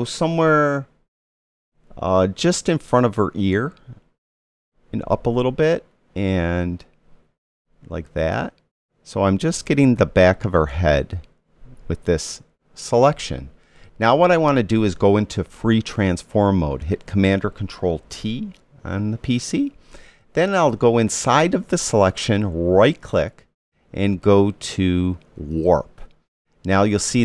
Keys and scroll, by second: 18.8 super+t.